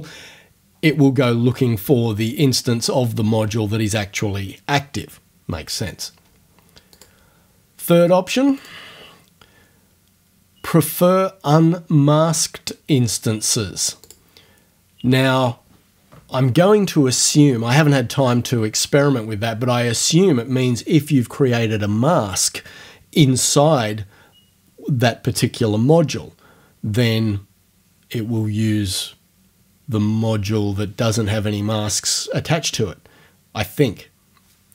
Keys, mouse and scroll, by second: 7.0 click, 8.6 click, 14.1 click.